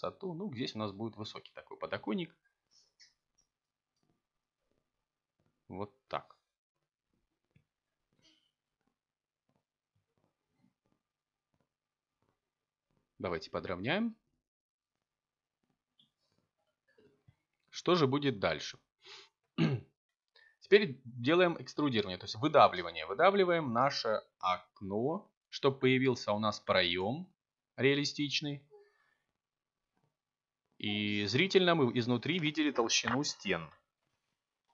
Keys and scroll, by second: 14.4 a, 21.3 e, 25.5 z.